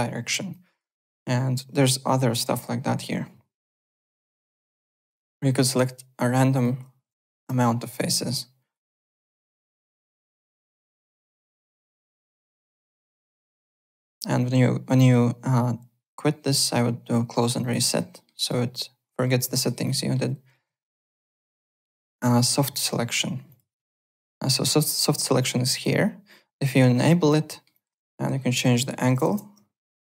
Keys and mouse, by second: 0.5 click, 4.1 click, 4.9 click, 5.8 click, 6.4 click, 7.0 KP_0, 7.2 KP_Decimal, 7.4 KP_5, 7.4 Return, 7.4 KP_Enter, 8.3 click, 9.3 click, 10.2 click, 10.8 click, 12.7 click, 17.6 click, 18.1 alt+middle click, 18.3 alt+click, 19.2 alt+middle click, 19.5 alt+right click, 19.7 alt+click, 19.9 alt+middle click, 20.6 alt+Tab, 21.1 alt+click, 21.7 click, 22.5 alt+middle click, 22.7 alt+click, 22.7-23.6 typing, 23.5 click, 25.7 click, 26.6 click, 27.5 alt+middle click, 27.7 alt+click, 28.6 click, 29.0 KP_1, 29.0 KP_0, 29.3 KP_Enter, 29.3 Return.